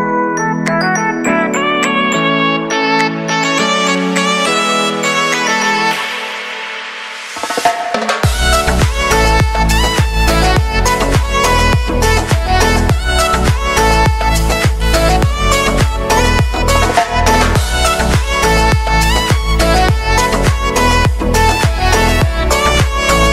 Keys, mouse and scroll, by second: 2.6 click, 3.4-5.0 typing, 5.4 click, 8.5 Return, 9.6 click, 10.6 Return, 11.4 click, 13.9 click.